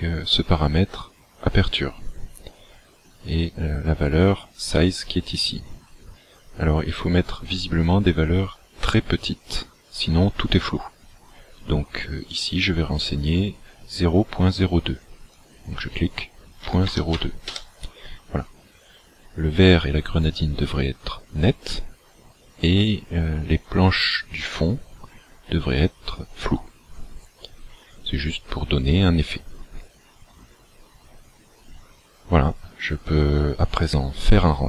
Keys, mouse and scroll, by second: 15.3 click.